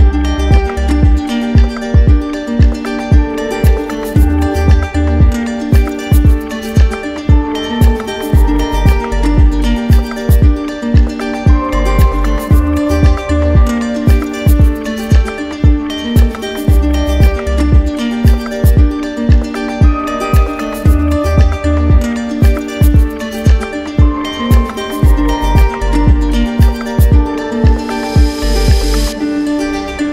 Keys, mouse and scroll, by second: 0.2 click, 0.8 shift+click, 1.5 click, 2.8 alt+click, 4.4 alt+click, 4.9 click, 5.4 click, 7.2 click, 9.4 click, 10.8 alt+click, 12.1-13.2 drag, 17.5-18.7 drag, 22.5-23.5 drag, 23.8-24.8 drag, 25.3 click, 25.7 alt+click, 26.4 click, 27.5 click, 28.8 alt+click, 29.5 alt+click.